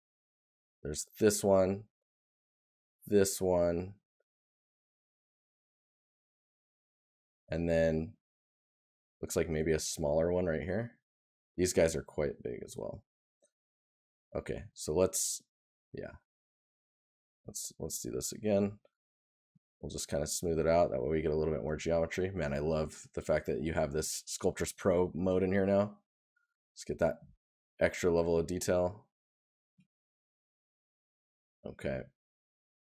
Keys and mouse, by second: 6.9 right click, 12.7 right click, 14.5 right click, 17.8 right click, 19.1 right click, 21.3 right click, 22.6 right click, 26.4 right click, 32.5 right click.